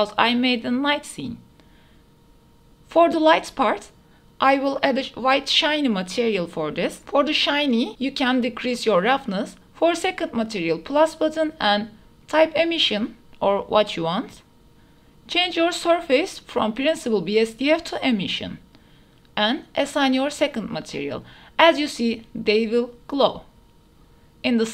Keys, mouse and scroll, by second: 0.0 ctrl+s, 0.6 shift+click, 1.0 click, 1.8 click, 2.4-4.4 middle drag, 6.4-6.7 shift+middle drag, 6.8 middle click, 7.3 shift+middle click, 8.3-10.1 middle drag, 15.1 s, 17.4-19.2 drag, 22.0 Tab, 22.2-23.4 middle drag.